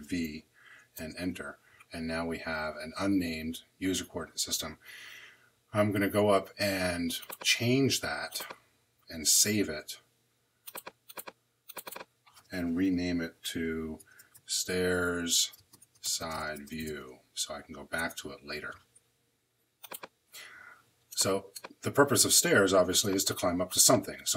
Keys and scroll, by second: 0.0 v, 0.9 Return, 13.7-17.3 typing, 17.9 Return.